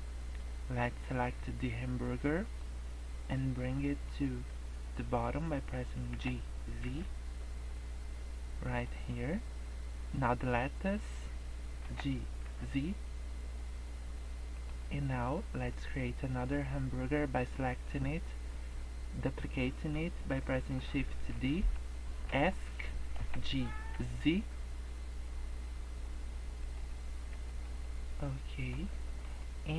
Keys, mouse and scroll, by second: 2.4 click, 6.1 g, 10.2 click, 11.8 g, 17.5 click, 21.2 shift+d, 23.2 g, 27.0 scroll up 1, 27.4 shift+middle click, 27.8 middle click, 28.8 scroll down 1, 28.9 middle click, 29.4 middle click.